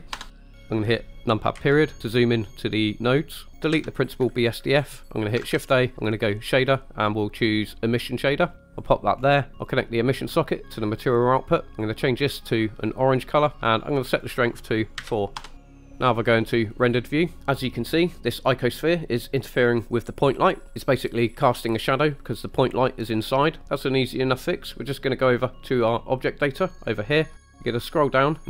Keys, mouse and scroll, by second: 1.6 KP_Decimal, 3.5 Delete, 3.5 ctrl+z, 3.5 ctrl+\, 5.5 shift+a, 8.8 click, 9.3-9.7 scroll up 1, 9.7-11.1 drag, 11.7 click, 14.2-15.5 drag, 17.1 click, 26.1 middle click, 26.8 click, 27.7-28.4 scroll down 3.